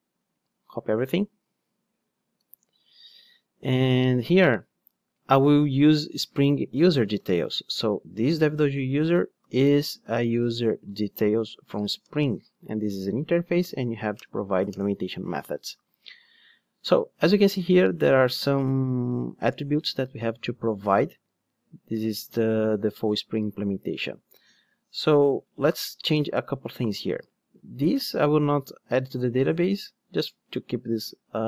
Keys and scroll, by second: 2.3 super+c, 2.4 super+v, 8.5 Return, 13.6 alt+Return.